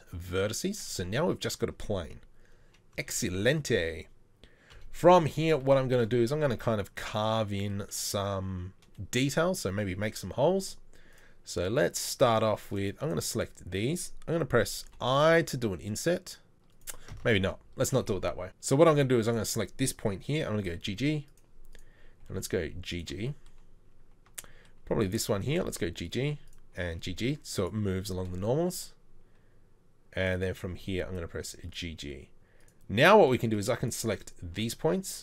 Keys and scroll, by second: 2.9 KP_4, 4.7 KP_4, 5.3 KP_3, 17.1 ctrl+z, 20.5 g, 22.2 g, 25.5 g, 26.7 g, 30.6 g.